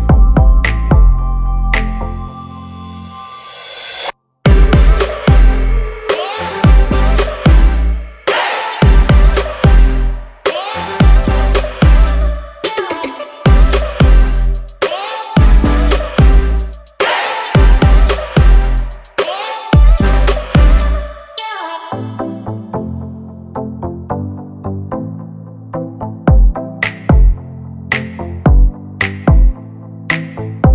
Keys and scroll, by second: 4.1 space, 8.0 p, 11.4 space, 12.6 m, 13.4 Up, 14.5 space, 18.5 l, 27.3 space, 28.3 Delete.